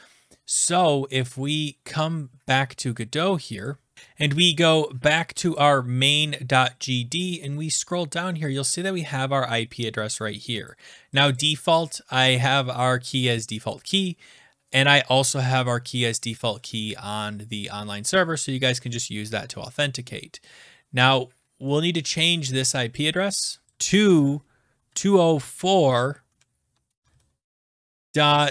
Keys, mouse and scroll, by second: 3.7 click, 3.9 click, 3.9 scroll down 7, 4.8-5.4 scroll down 2, 5.5 scroll, 5.6 click, 7.3-8.2 scroll, 8.5 click, 10.6 click, 11.2 click, 11.3 click, 23.0 click, 23.6 click, 23.7 click, 24.0 click, 24.1 click, 24.6-25.6 typing, 26.3 Right, 26.9 Right, 27.0 Right, 27.7 Left.